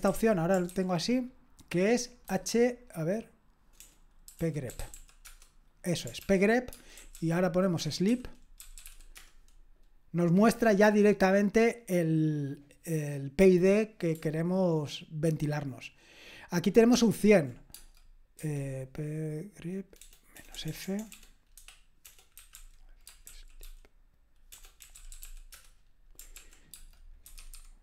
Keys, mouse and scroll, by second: 0.0 super+k, 0.7 ctrl+c, 3.8-5.4 typing, 6.2 ctrl+p, 6.7-9.5 typing, 16.9 ctrl+p, 17.7 space, 18.4 1, 20.0-25.7 typing, 26.3 ctrl+p, 26.7-27.8 typing.